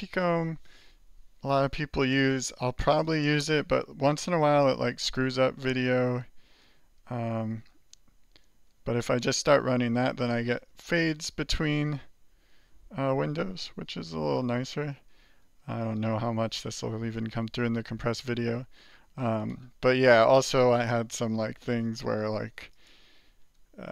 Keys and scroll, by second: 3.7 Return, 4.6 alt+Return, 5.3 alt+Return, 6.8 alt+2, 7.7 alt+3, 8.4 alt+4, 9.2 alt+2, 9.8 alt+1, 10.2 alt+2, 10.4 alt+3, 11.0 alt+4, 12.3 alt+8, 12.9 alt+7, 13.8 alt+2, 14.1 alt+5, 14.9 alt+4, 15.4 alt+3, 21.7 alt+q, 23.2 alt+q.